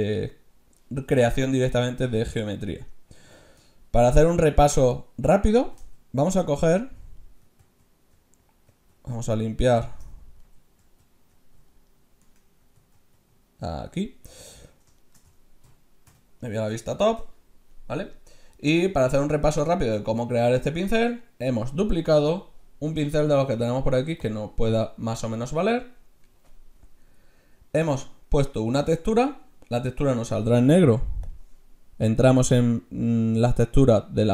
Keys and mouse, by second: 5.7 ctrl+z, 6.8 ctrl+z, 7.6 ctrl+z, 8.1 ctrl+z, 8.7 ctrl+z, 9.1 ctrl+z, 10.8 ctrl+z, 11.3 ctrl+z, 12.2 Tab, 13.1 ctrl+z, 14.5 Tab, 15.6 KP_6, 16.1 KP_7, 22.1-23.8 drag, 31.3-33.1 drag.